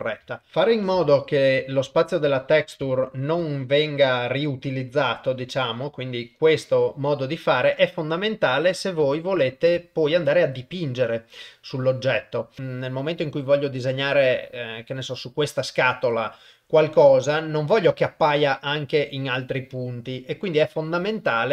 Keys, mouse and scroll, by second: 0.3 shift+middle click, 1.0 middle click, 2.9 ctrl+middle click, 3.5 shift+middle click, 4.9-6.0 drag, 8.3 middle click, 9.1 ctrl+middle click, 9.8 shift+middle click, 17.4 ctrl+middle click, 18.0 shift+middle click.